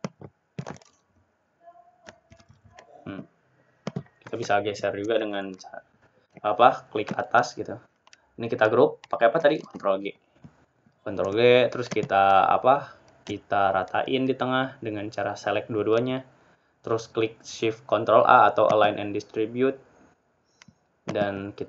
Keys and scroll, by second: 15.2 ctrl+g.